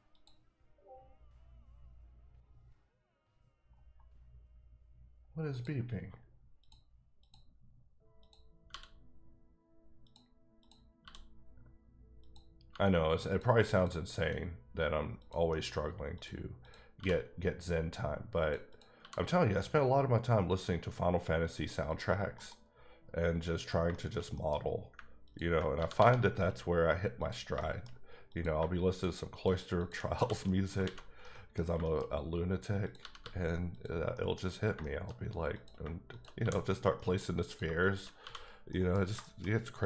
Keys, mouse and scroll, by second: 0.1 click, 4.1-4.5 scroll down 2, 4.6-5.5 scroll up 1, 5.5 click, 6.6 click, 7.8 click, 8.7 f, 10.0 click, 10.6 click, 11.0 f, 12.2 click, 12.7 g, 13.3 click, 13.7 click, 14.1 f, 15.1 click, 15.5 middle click, 16.1 click, 16.6 click, 16.9 f, 18.4 click, 18.7 double click, 19.0 f, 20.5 click, 21.9 click, 22.3 KP_Decimal, 22.7-23.1 scroll down 5, 23.4 middle click, 25.2 ctrl+click, 25.7 g, 25.9 g, 27.2 click, 27.6 shift+middle click, 28.3 click, 29.3 shift+double click, 29.8 shift+click, 30.1 f, 30.5 middle click, 30.8 alt+a, 31.2 middle click, 31.7 shift+middle click, 32.8 click, 33.0 g, 33.2 g, 33.7 click, 34.1 middle click, 34.4 scroll down 2, 34.9 shift+middle click, 35.5 click, 36.4 f, 36.9 middle click, 37.4 click, 38.7 middle click.